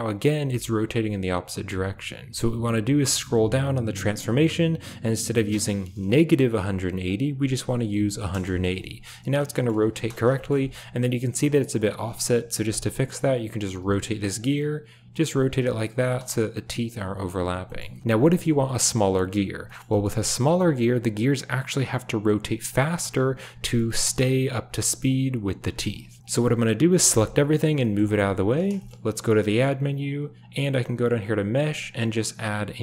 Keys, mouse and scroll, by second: 5.3-8.2 drag, 9.4 shift+middle drag, 9.8 space, 10.3 shift+middle drag, 13.5 r, 15.9 space, 17.7 shift+middle click, 17.9 middle click, 18.2 shift+middle click, 19.6 middle click, 19.8 shift+middle drag, 23.6 shift+middle click, 23.8 middle click, 26.1 KP_7, 26.2 x, 27.0 a, 27.7 g, 28.8 shift+drag, 29.1 shift+a.